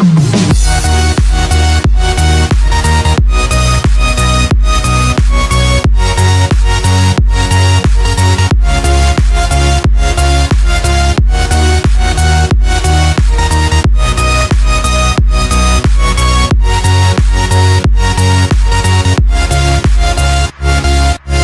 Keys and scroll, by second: 2.6 space, 3.0 x, 4.3 ctrl+0, 9.3 F7, 13.6 ctrl+=, 20.2 Return, 20.5 ctrl+-.